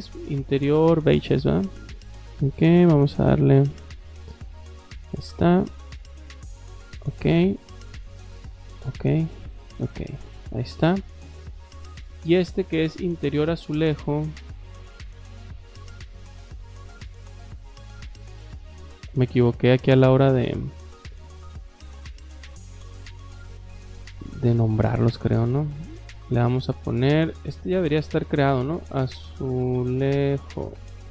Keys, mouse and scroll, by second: 1.1 click, 4.2 click, 4.3 click, 5.9 click, 6.9 click, 8.5 click, 9.5 click, 10.3 scroll up 1, 11.4 click, 13.2 click, 16.4 click, 21.2 click, 22.9 click, 27.0 click, 27.6-29.8 typing.